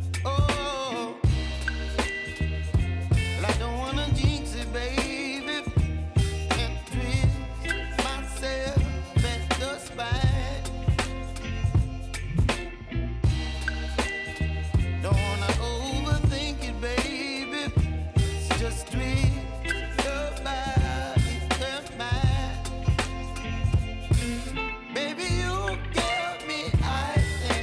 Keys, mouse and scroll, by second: 0.1 ctrl+click, 0.9 ctrl+shift+v, 1.7-6.2 drag, 6.2 ctrl+d, 8.3-10.7 drag, 10.7 ctrl+x, 11.8 click, 12.3 ctrl+shift+v, 12.8-18.0 drag, 18.0 ctrl+x, 18.8 click, 19.4 ctrl+shift+v, 20.2 click, 23.3-27.6 drag.